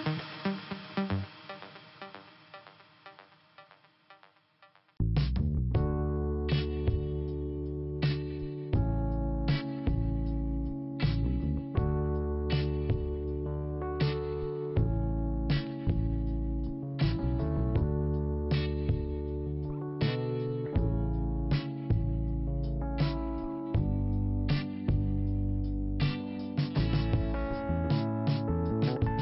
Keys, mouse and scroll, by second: 0.9 click, 3.9 click, 5.7 click, 6.9 click, 9.1 middle click, 10.2 click, 11.8 click, 13.3 click, 14.3 middle click, 15.5 click, 18.0 middle click, 18.8-19.2 scroll down 1, 19.2 middle click, 20.0 click, 22.4 click, 24.8 middle click, 25.8 click, 27.7 click.